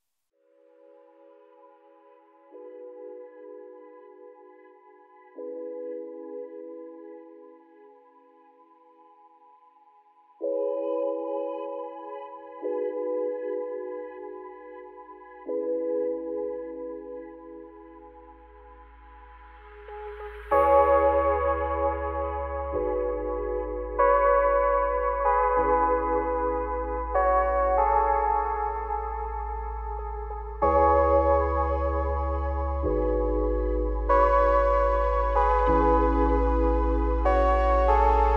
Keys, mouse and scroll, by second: 0.7-1.3 scroll up 5, 0.9 shift+middle click, 1.3 z, 1.9 scroll down 2, 2.0 shift+middle click, 2.3-2.8 scroll up 2, 2.8 click, 3.2 scroll down 1, 3.5 shift+middle click, 3.9-4.4 scroll up 2, 4.4 shift+d, 6.4 shift+middle click, 6.6-7.7 scroll up 7, 7.7 g, 10.3-11.0 scroll down 1, 11.4 g, 12.5-12.9 scroll down 1, 12.9-14.1 shift+middle drag, 14.1 z, 14.7 shift+middle click, 15.1 scroll up 3, 15.3 z, 15.9 click, 16.4 shift+middle click, 16.9 shift+d, 18.6 z, 19.7 g, 20.8 g, 22.0 scroll up 3, 22.2 z, 22.7 g, 23.7 g, 25.4 z, 25.6-26.0 scroll down 7, 26.0 middle click, 26.5-27.6 scroll up 3, 26.8 shift+middle click, 27.6 click, 28.0 `, 28.8 `, 29.5 shift+middle click, 29.8 scroll up 5, 30.0 z, 30.6 shift+middle click, 30.8-31.2 scroll up 5, 31.6 click, 32.4-32.8 scroll down 4, 32.8 shift+middle click, 33.3 scroll down 3, 33.5 shift+middle click, 33.8-34.4 scroll up 7, 34.4 shift+middle click, 34.6-35.5 scroll up 4, 35.5 shift+click, 37.1 g.